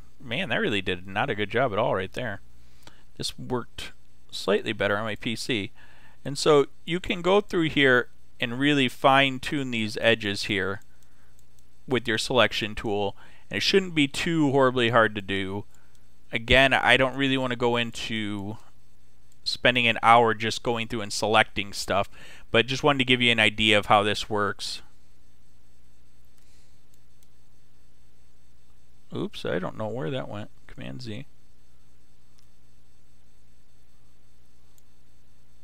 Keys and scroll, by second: 1.6 [, 30.8 super+z.